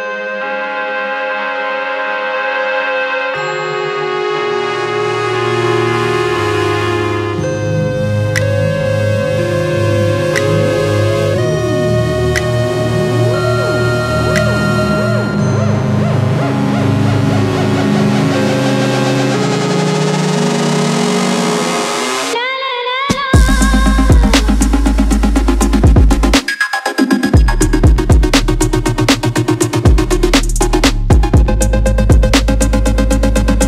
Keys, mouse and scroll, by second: 0.0 g, 0.8 click, 2.6 Tab, 5.3 g, 5.7 click, 6.7 g, 7.2 click, 8.4 g, 8.8 click, 9.2 click, 9.4 g, 11.1 click, 11.6 click, 13.8-15.8 drag, 15.8 scroll down 1, 16.0-18.0 shift+middle drag, 18.0 click, 20.1-22.2 drag, 22.2 z, 22.4 click, 23.0 Delete, 28.5 click, 31.3-33.6 drag.